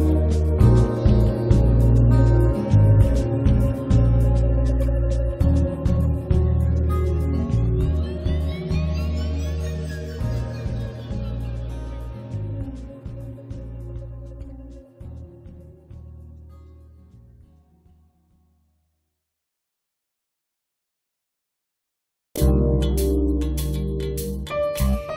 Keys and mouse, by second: 0.2 middle click, 0.5 click, 1.4 middle click, 1.7-3.6 drag, 3.6 middle click, 4.1-7.6 drag, 7.7-9.1 drag, 9.4 click, 9.8 right click, 10.0 middle click, 10.1 click, 11.0 middle click, 11.6 click, 12.6 8, 13.4 click, 13.8 middle click, 14.0 click, 14.8 click, 15.0 click, 15.4-16.6 middle drag, 16.6 click, 17.4-19.4 middle drag, 19.4 1, 19.7 click, 19.9 middle click, 20.5-22.2 drag, 20.9 middle click, 20.9 right click, 21.6 right click, 22.2-25.1 middle drag, 22.4 click, 23.3-24.3 drag, 23.5 right click.